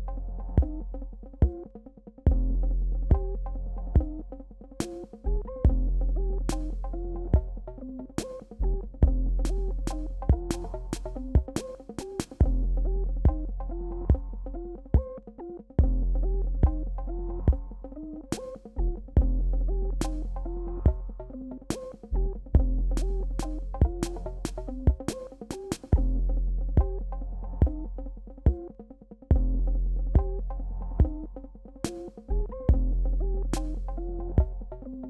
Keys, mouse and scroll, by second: 4.3-6.6 drag, 8.5 ctrl+d, 9.3 ctrl+click, 10.7 v, 12.4 b, 14.0 shift+x, 14.4 click, 15.2 shift+x, 17.5-22.8 drag, 23.7 ctrl+d, 25.2-27.8 drag, 27.8 alt+scroll down 1, 28.9 alt+scroll up 1, 29.7 alt+scroll up 1, 32.2 v, 32.3 alt+scroll up 1, 33.4 alt+scroll up 1, 34.5 b.